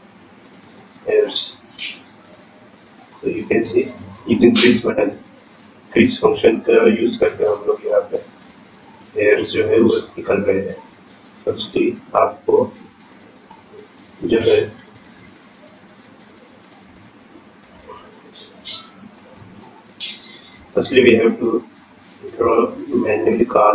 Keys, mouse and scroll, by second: 0.6 click, 1.4 click, 6.4-7.0 scroll down 8, 7.0-7.5 scroll down 7, 7.5-8.5 scroll up 10, 8.6 shift+middle click, 9.1-9.9 scroll up 2, 9.9-10.2 scroll up 1, 10.4 scroll up 1, 10.8 click, 13.4 click, 14.4 click, 17.5-18.7 scroll down 13, 18.8 scroll up 3, 19.5 shift+middle click, 19.9-20.5 scroll up 2, 20.5-20.9 scroll down 3, 21.2-21.7 scroll up 3, 22.2-22.8 scroll down 3, 22.8 shift+middle click.